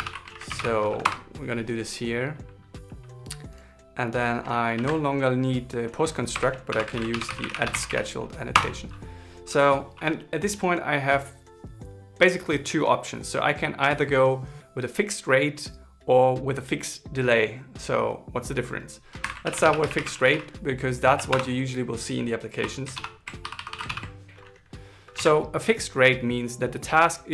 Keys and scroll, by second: 0.7 shift+s, 7.0 alt+l, 7.3 shift+s, 20.6 shift+8, 23.3 shift+-, 24.2 shift+l, 25.5 super+s.